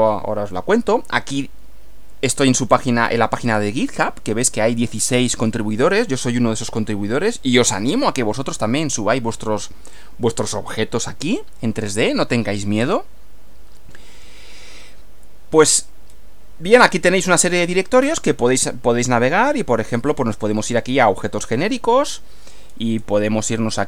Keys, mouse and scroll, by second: 2.7 scroll up 2, 2.9 scroll down 1, 3.3-3.7 scroll up 2, 15.7-16.3 scroll down 4, 20.7 click, 22.7-23.2 scroll down 2.